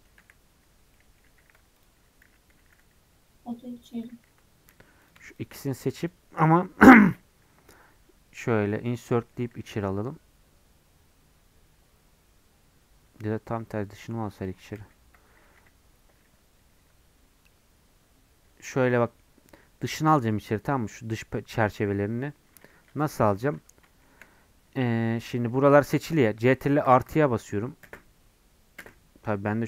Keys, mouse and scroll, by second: 0.2 3, 0.9 middle click, 1.4 2, 1.8 alt+click, 2.3 g, 4.3 3, 5.1 click, 6.1 shift+click, 7.9 i, 9.1 middle click, 9.4 e, 14.8 ctrl+z, 17.0 scroll up 2, 18.7-19.1 scroll down 2, 19.1 middle click, 19.6 scroll up 1, 20.7 scroll up 2, 22.2-22.7 scroll down 2, 22.7-24.4 shift+middle drag, 24.4-25.1 scroll up 1, 26.9 ctrl+KP_Subtract.